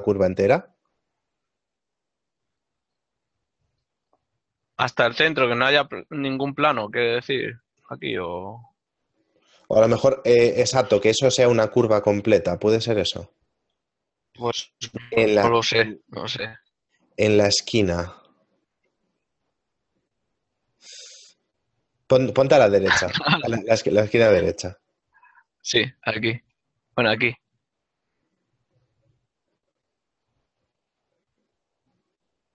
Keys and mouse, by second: 4.1 shift+middle click, 8.8 right click, 18.5 middle click, 22.2 ctrl+middle click, 24.0 shift+middle click, 24.5 middle click, 28.2 click, 32.2 middle click.